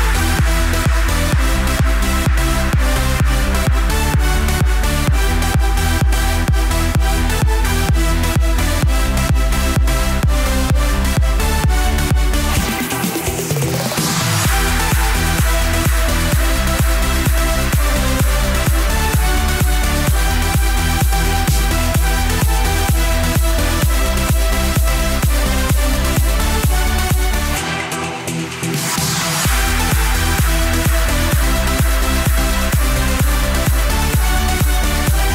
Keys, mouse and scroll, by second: 0.1 click, 0.5 scroll up 4, 0.7-1.5 shift+middle drag, 1.5 click, 1.7 scroll down 4, 1.9-2.2 shift+middle drag, 2.2-3.2 scroll up 2, 2.5 shift+middle click, 3.2 shift+click, 3.8 KP_7, 4.1 scroll down 1, 4.4 shift+middle click, 5.2 ctrl+j, 8.6-10.6 drag, 11.5 click, 12.9-18.4 drag, 18.4 KP_3, 19.1 shift+middle click, 19.8 shift+d, 20.6 r, 22.4 g, 23.4-23.9 scroll up 5, 23.9 shift+middle click, 24.8 r, 28.0 KP_1, 28.4-28.8 scroll down 5, 28.8 shift+middle click, 29.1-29.7 scroll up 3, 29.7-30.1 scroll up 1, 30.1 g, 33.3 KP_3, 33.7-34.3 scroll up 1, 34.3 g.